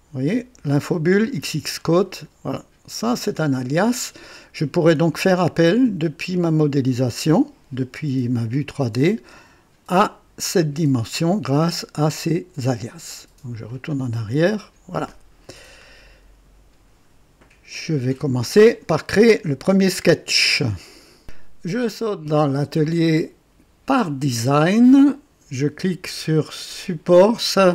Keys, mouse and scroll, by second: 1.4 click, 13.6 click, 14.3 click, 21.2 click, 22.8 click, 24.0 click, 26.6 click.